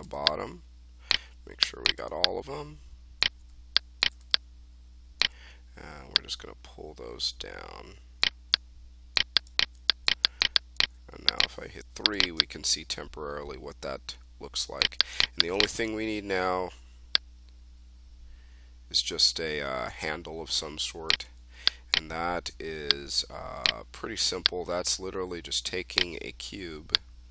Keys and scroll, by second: 11.6 3.